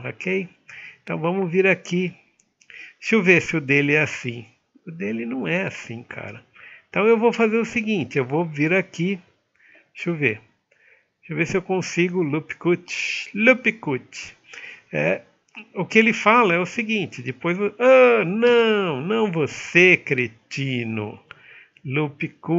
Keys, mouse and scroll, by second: 3.8 middle click.